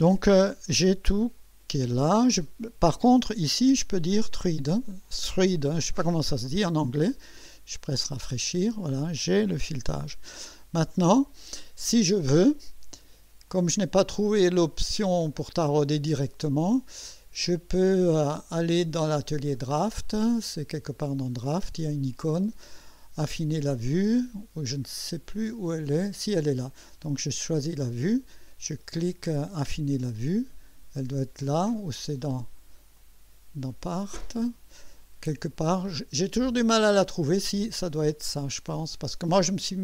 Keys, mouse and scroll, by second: 3.5 click, 4.0 click, 4.8 click, 7.9 click, 9.0-9.6 drag, 9.6 KP_1, 10.8 click, 13.5 click, 16.1 click, 18.8 click, 19.5 click, 27.8 click, 32.9 click, 33.7 click.